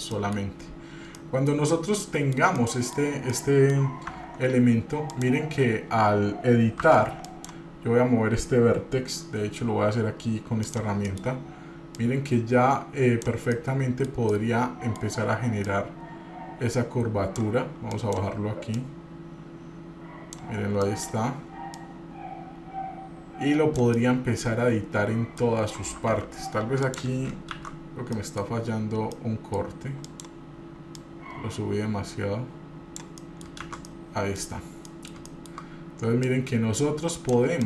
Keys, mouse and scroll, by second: 0.3 middle click, 0.8-1.3 scroll up 1, 1.3 middle click, 1.7 scroll down 1, 2.2 shift+middle click, 2.7 middle click, 3.3 scroll up 1, 3.5 middle click, 4.3 Tab, 5.3 click, 7.0 1, 7.4 click, 10.8 click, 11.2 middle click, 12.1-13.4 drag, 13.7 middle click, 14.5 middle click, 15.0 click, 15.9-17.6 drag, 18.1 click, 18.9-20.5 drag, 21.0 click, 21.9-24.0 drag, 24.1-25.7 middle drag, 26.3 F3, 27.7 shift+z, 28.3 middle click, 29.4 middle click, 30.3 click, 31.1-33.2 drag, 33.4 middle click, 33.8 shift+z, 34.0 middle click, 34.8 scroll up 1, 35.0 middle click, 35.4 shift+middle click, 36.4-37.5 drag.